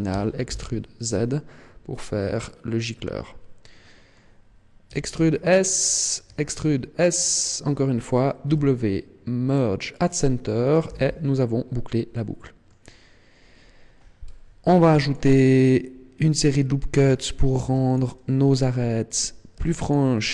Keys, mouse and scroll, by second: 0.0 e, 2.4 click, 3.5 middle click, 4.8 e, 5.9 click, 6.2 e, 8.1 click, 8.5 w, 10.8 z, 11.2-12.1 scroll down 1, 12.1 middle click, 12.1 scroll down 1, 13.5-13.9 scroll up 3, 14.6 ctrl+r, 16.4 click, 17.5 ctrl+r, 19.0 click, 19.6 ctrl+r.